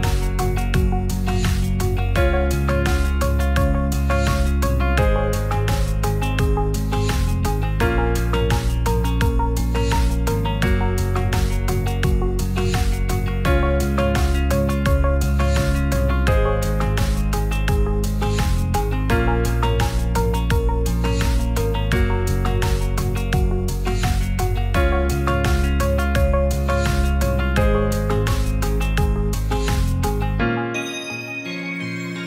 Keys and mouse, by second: 2.3 Tab, 2.6 click, 3.5 3, 3.5 2, 4.3 3, 4.5 click, 9.8 ctrl+shift+s, 13.0 shift+click, 18.6 ctrl+click, 18.9 ctrl+Tab, 19.4 Tab, 21.3 i, 22.8 click, 22.9 g, 23.0 z, 27.6 i, 29.4 click, 29.7 e, 30.7 click.